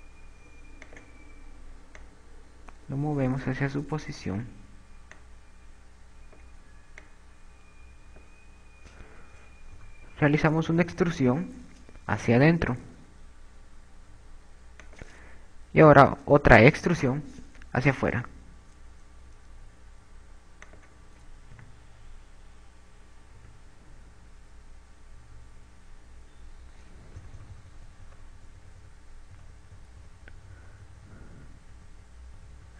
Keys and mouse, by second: 0.6 s, 2.3 click, 3.4 click, 6.5 click, 8.4 click, 10.5 KP_2, 11.4 KP_6, 12.2 KP_6, 13.3 e, 15.8 click, 18.4 e, 22.1 click, 22.4 a, 23.3 Tab, 24.6 Tab, 28.5 KP_6, 28.5 KP_8, 29.2 KP_6, 30.9-32.7 typing.